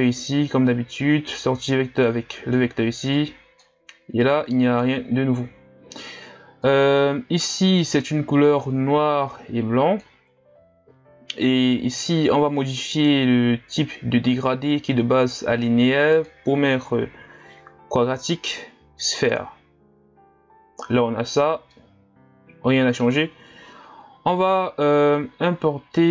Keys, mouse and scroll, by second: 7.3 click, 7.5-23.9 middle drag, 23.9-25.0 scroll down 4, 25.0-25.5 scroll down 1, 25.5-26.1 scroll up 2.